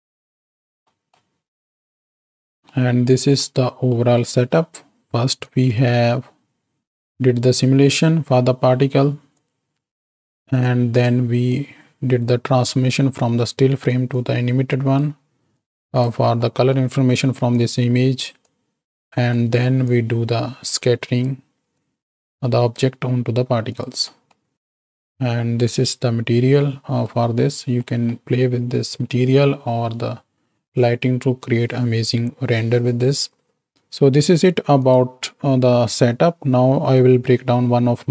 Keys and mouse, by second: 1.1 middle click, 2.6 ctrl+space, 2.7 click, 4.0 click, 5.4-7.1 drag, 9.4-10.7 drag, 11.5-13.0 drag, 14.2-15.3 drag, 15.8 click, 16.5 middle click, 17.8-19.2 drag, 19.3 middle click, 19.9-21.4 drag, 21.7-22.9 drag, 23.7 click, 24.0 middle click, 24.5 ctrl+space, 25.0 click, 26.7 click, 27.9 click.